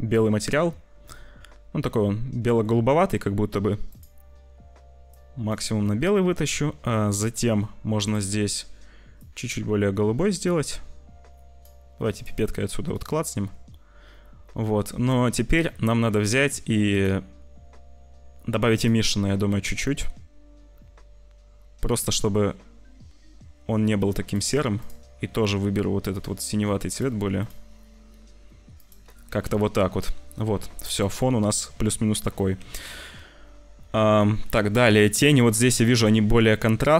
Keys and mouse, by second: 2.5 click, 16.8 click, 19.8-23.5 drag, 23.5 middle click, 28.7 click, 29.5 ctrl+s, 32.6 ctrl+s.